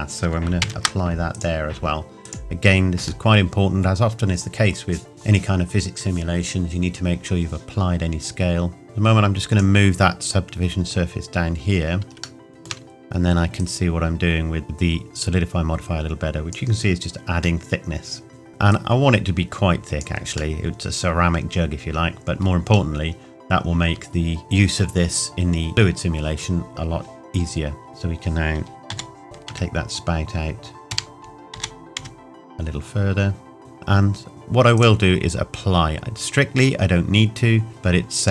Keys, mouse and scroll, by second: 1.3 click, 3.2 middle click, 4.0 scroll down 1, 8.7 scroll up 1, 8.8 click, 11.3 scroll up 1, 12.4 shift+middle click, 13.5 click, 16.9 scroll down 1, 17.6 middle click, 18.7 click, 20.5 middle click, 22.7-23.2 scroll up 1, 23.8 Tab, 27.9 click, 28.9 g, 34.7 click, 37.7 click.